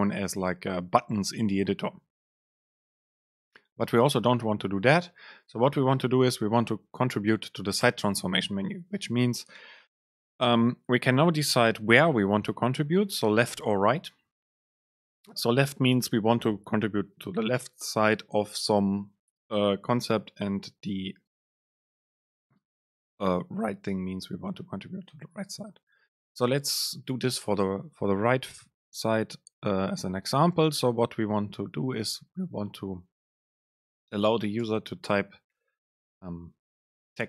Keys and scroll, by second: 5.2 super+space, 12.1 super+space, 32.3 Down, 34.4 Return, 34.8 super+space.